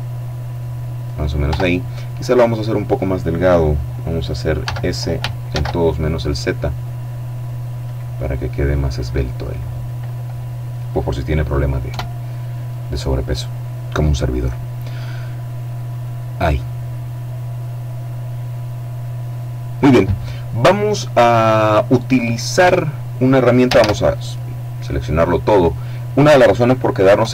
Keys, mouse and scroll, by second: 0.3 click, 0.7 Tab, 3.9 s, 4.8 shift+z, 7.1 click, 8.6 middle click, 11.2 KP_7, 15.0-19.5 middle drag, 20.2-21.2 scroll up 1, 21.2 scroll up 1, 21.9 Tab, 22.9 a, 24.5-25.9 drag, 26.5 KP_7.